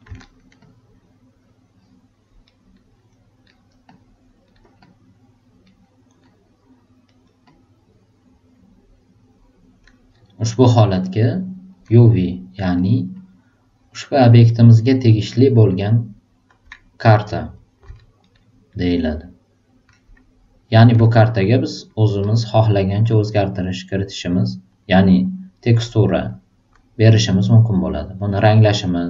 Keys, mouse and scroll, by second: 0.2 alt+right click, 0.6-2.1 alt+drag, 2.4 alt+right click, 3.4 alt+super+right click, 3.9 alt+click, 4.4 alt+right click, 4.8 alt+click, 5.6 alt+right click, 6.2 alt+click, 7.0 alt+right click, 7.4-8.5 alt+drag, 10.8 alt+super+right click, 11.2 alt+super+click, 12.7 alt+super+right click, 13.1 alt+super+click, 14.2 alt+super+right click, 14.4 alt+super+middle click, 14.7-16.3 alt+super+drag, 18.2 alt+super+right click, 21.1 alt+super+right click, 22.2 alt+super+click, 23.1 alt+middle click, 24.1 alt+right click, 27.0 alt+right click, 28.3 alt+click.